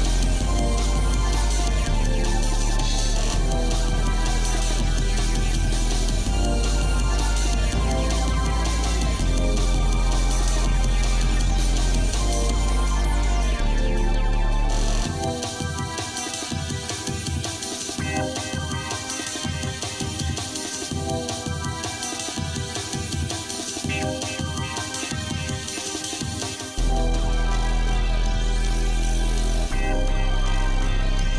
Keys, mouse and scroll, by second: 1.3 g, 6.0 shift+middle click, 6.6 click, 7.0 Tab, 7.6 shift+middle click, 8.2 scroll up 2, 8.8 scroll down 2, 9.5 ctrl+Tab, 13.1 shift+middle click, 13.7 scroll up 1, 14.4 shift+middle click, 16.0 shift+middle click, 16.5 shift+middle click, 17.3 click, 17.9 shift+click, 18.7 shift+click, 19.9 scroll up 1, 20.5 scroll down 1, 21.0 shift+middle click, 22.4 KP_Decimal, 23.7 click, 24.2 shift+click, 25.1 shift+middle click, 27.9 ctrl+KP_Add, 29.4 s.